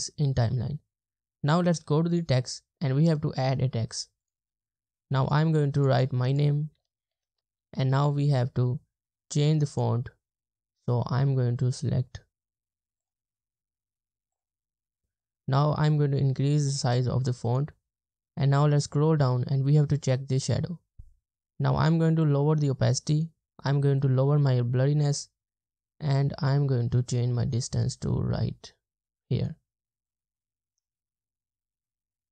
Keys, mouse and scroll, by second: 5.3 double click, 6.8 double click, 7.2 typing, 8.3-9.5 scroll up 1, 9.5 typing, 11.3-12.6 scroll down 1, 12.6 typing, 13.7-15.0 scroll down 1, 18.0-20.5 scroll down 1.